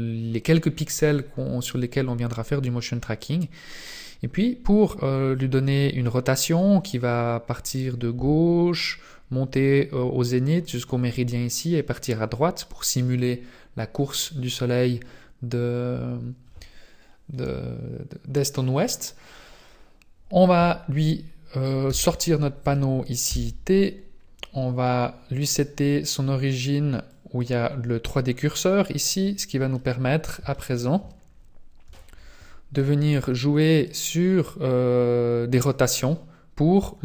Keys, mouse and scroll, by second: 0.3-1.6 scroll up 2, 2.3 scroll down 1, 6.1-6.7 scroll down 2, 6.8-10.1 scroll down 1, 21.9 n, 22.6 n, 23.3 t, 25.3 click, 27.3 click, 29.0 scroll up 2, 29.7 middle click, 30.5 shift+middle click, 31.8 n.